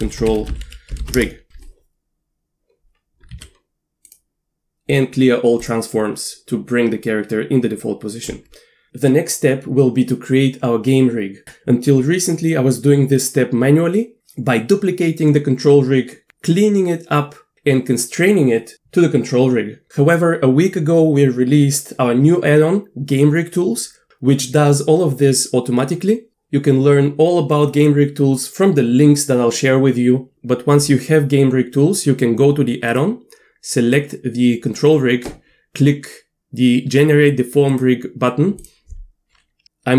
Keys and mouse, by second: 3.4 a, 4.0-5.7 drag, 8.3 Tab, 32.9 click, 37.7-39.9 drag.